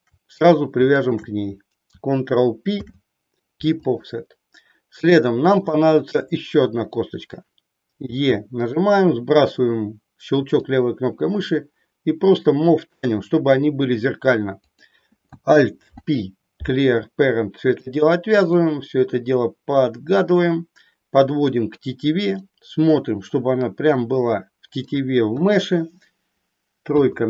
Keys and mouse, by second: 1.0 shift+click, 2.8 ctrl+p, 5.6 click, 8.1 e, 10.6-12.8 drag, 14.6 click, 15.8 alt+p, 18.5-21.5 drag, 22.5-24.8 middle drag, 25.2 KP_1, 26.8 KP_3.